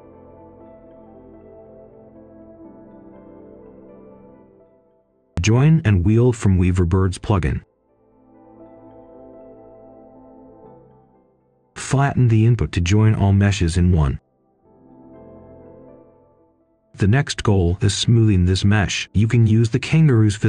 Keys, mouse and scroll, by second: 0.2 right click, 1.9-2.6 scroll down 1, 2.6 click, 3.8 right click, 4.1 scroll up 1, 4.4 click, 5.2-7.2 typing, 8.3 click, 10.0 shift+click, 11.1 right click, 11.8 click, 13.7 ctrl+shift+i, 14.6 middle click, 15.1 click, 15.6 right click, 16.3 shift+right click, 17.2 right click, 18.8 shift+right click, 19.7 ctrl+right click, 20.2 shift+right click.